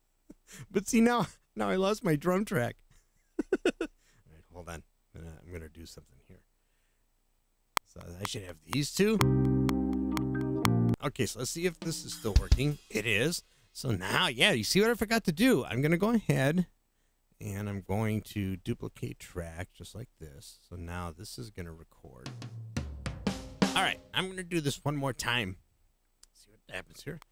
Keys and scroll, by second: 7.7 space, 10.9 space, 27.0 *.